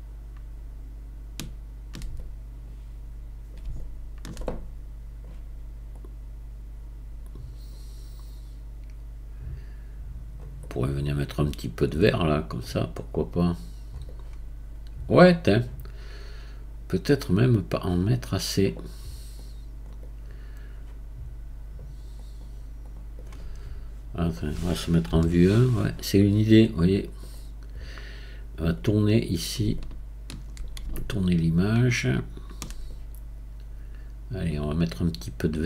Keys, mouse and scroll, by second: 5.9-8.9 drag, 10.6-12.6 right drag, 12.6-14.1 drag, 14.1-17.9 right drag, 19.4-20.0 drag, 20.0-22.2 right drag, 22.2-23.2 drag, 23.2 right click, 25.1 KP_1, 26.8-35.2 right drag, 35.2-35.6 drag.